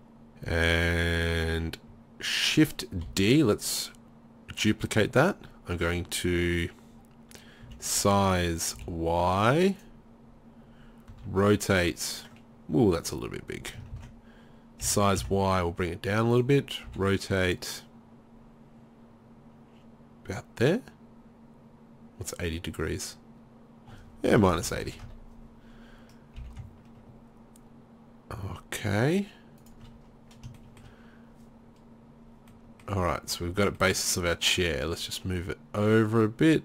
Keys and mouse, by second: 3.1 shift+d, 5.3-7.7 drag, 7.7 s, 9.8-11.6 drag, 11.2 r, 13.1 click, 14.0 ctrl+z, 14.9 s, 16.9 r, 18.1 click, 26.4 g, 29.7 click, 30.6 middle click, 32.3 middle click, 33.0 z, 35.0-36.1 drag, 36.1-36.6 middle drag.